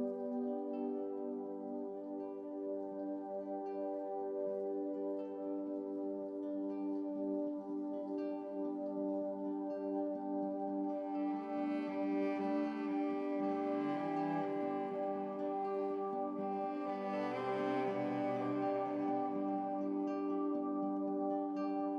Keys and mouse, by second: 0.4-9.5 typing, 1.5 middle click, 5.3-6.9 drag, 7.5 middle click, 7.9-9.4 drag, 8.2 alt+a, 8.5 alt+a, 9.0 alt+a, 11.0 click, 11.8-14.4 typing, 12.0 Tab, 12.0 middle click, 12.2 Tab, 12.7 Tab, 12.9 click, 13.5 Tab, 13.8 click, 14.4 alt+a, 14.6 click, 16.1 z, 17.3-19.4 typing, 17.8 middle click, 17.8 alt+a, 18.4 ctrl+z, 18.9 alt+a, 18.9 click, 19.4 alt+a, 19.7 middle click, 20.3 click, 21.0 middle click, 21.1 click, 21.4 alt+a, 21.6 KP_3.